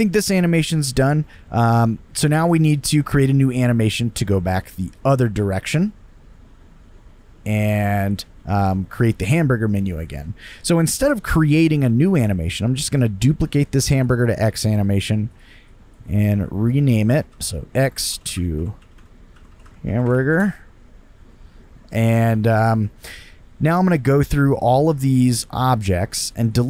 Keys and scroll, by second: 17.3-20.6 typing.